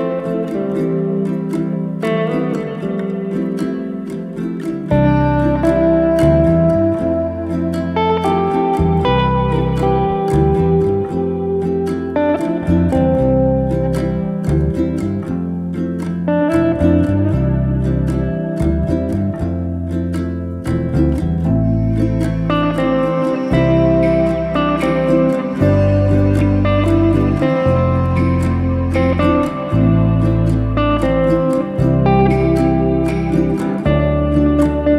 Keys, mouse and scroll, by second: 2.2-4.4 drag, 4.7 middle click, 5.5 g, 7.6-8.6 middle drag, 8.6 g, 10.0-10.7 middle drag, 10.7-11.8 scroll down 3, 11.9 scroll down 4, 12.0-14.4 middle drag, 14.4 KP_1, 15.2-16.4 middle drag, 16.4 click, 17.3-18.1 shift+middle drag, 18.1 alt+d, 22.0-23.5 middle drag, 23.7-25.5 middle drag, 25.5-25.8 scroll up 1, 25.8 ctrl+z, 26.2-27.7 middle drag, 27.7 KP_1, 28.5-29.5 middle drag, 29.5 click, 30.2 alt+d, 32.2 alt+d, 34.0 g.